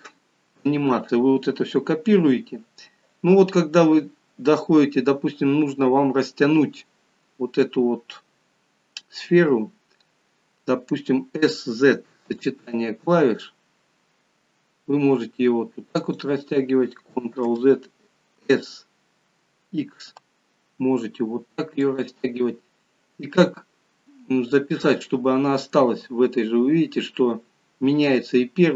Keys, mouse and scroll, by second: 17.4 ctrl+z, 24.6 click.